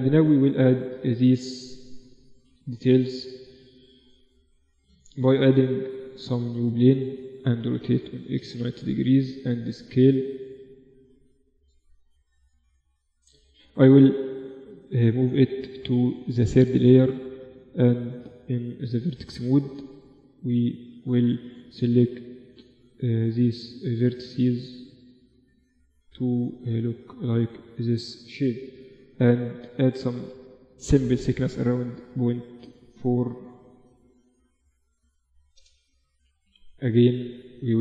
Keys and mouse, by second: 1.1-3.6 middle drag, 3.6 click, 4.1 shift+a, 6.9 r, 8.9 s, 10.2-14.0 middle drag, 13.6 m, 15.2-16.9 drag, 16.7 Tab, 19.3 g, 21.5 g, 23.4 g, 25.3 g, 26.7 Tab, 28.1 KP_7, 29.1 Tab, 29.5 a, 29.7 a, 30.7 e, 35.3 Tab, 36.0 KP_1, 36.5 z, 36.9 z.